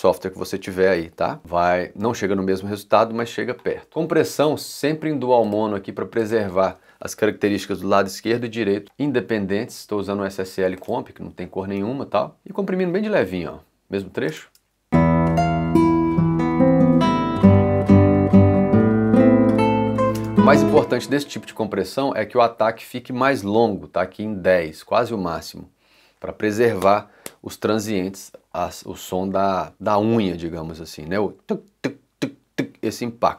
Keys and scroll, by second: 14.3 space.